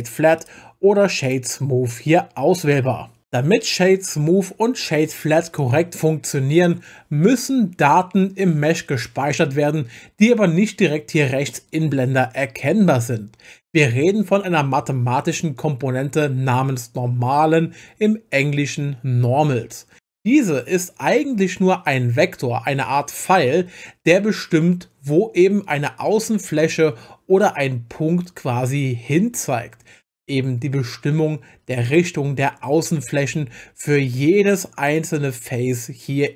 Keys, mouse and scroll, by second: 0.4-1.3 right drag, 31.8 click, 33.8-34.9 right drag.